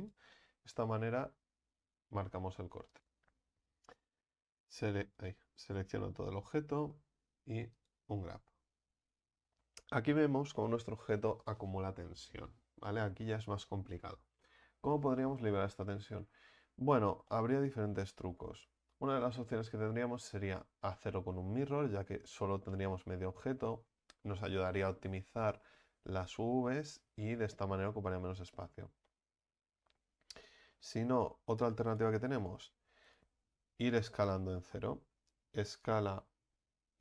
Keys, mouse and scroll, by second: 0.1 u, 5.2 right click, 5.6 a, 5.7 a, 8.0 u, 14.4-31.9 middle drag, 31.9-35.6 right drag, 35.6 s.